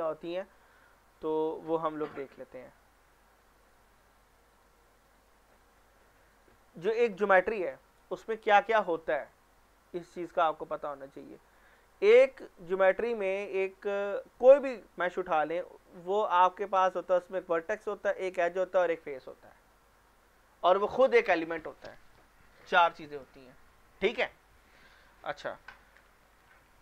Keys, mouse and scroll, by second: 1.2-3.0 drag.